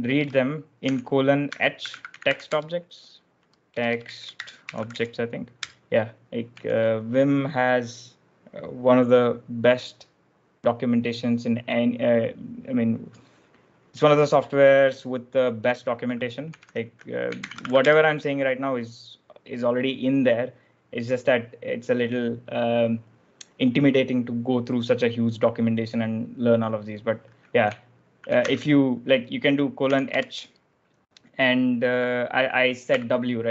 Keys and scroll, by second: 0.0-7.1 typing, 16.1-18.0 typing, 28.4 shift+;, 29.7-30.1 typing, 32.8 w.